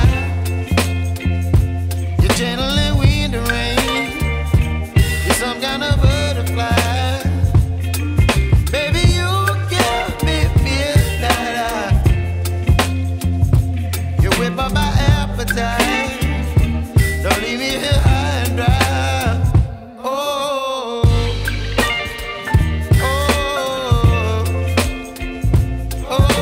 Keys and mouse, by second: 0.1 alt+click, 2.9 r, 3.1 click, 4.2 z, 4.4 click, 4.9 space, 5.1 click, 5.3 space, 6.0 click, 7.0-8.3 typing, 9.9 click, 16.1-17.8 typing, 16.3 click, 19.8-24.8 typing, 20.7 click, 21.7 click, 22.3 click, 23.7 click, 24.9 click.